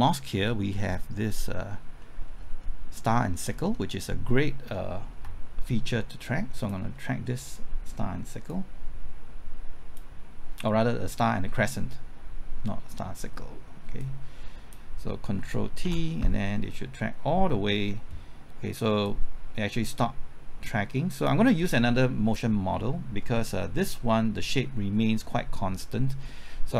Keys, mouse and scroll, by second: 0.1-1.8 drag, 1.8 scroll up 1, 2.0 middle click, 2.4-3.0 scroll up 1, 3.0 middle click, 3.2-3.7 scroll up 1, 3.7 middle click, 6.6 ctrl+click, 8.5-10.2 drag, 13.2-14.0 scroll down 1, 14.0-15.2 drag, 15.4 typing, 15.8 ctrl+t, 19.1-22.2 drag.